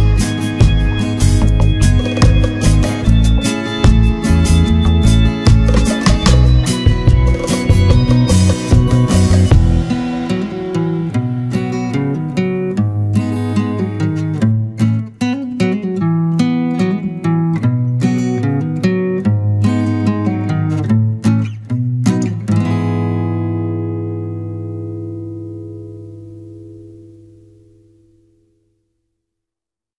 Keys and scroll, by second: 9.3 ctrl+z, 13.6 ctrl+-, 14.2 ctrl+0, 23.4 Return.